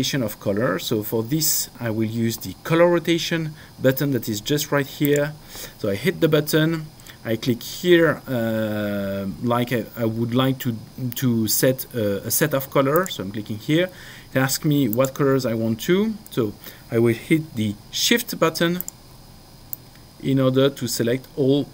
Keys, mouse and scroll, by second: 5.1 click, 12.9 click, 14.9 click, 18.8 click, 19.7 shift+click.